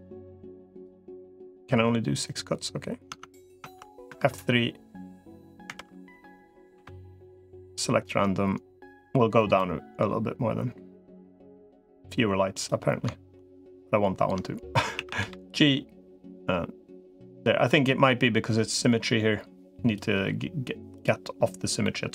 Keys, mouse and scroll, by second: 3.0 Tab, 3.4 Tab, 4.0 F3, 6.0 3, 6.6 F3, 9.4-12.6 drag, 14.8 a, 15.0 g, 20.0 g, 21.6 middle click.